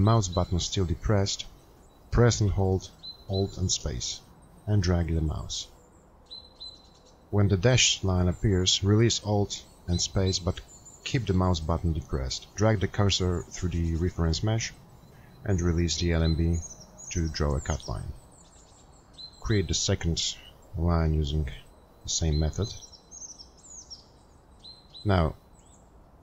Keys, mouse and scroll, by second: 5.6 click, 5.7 alt+space, 5.7 click.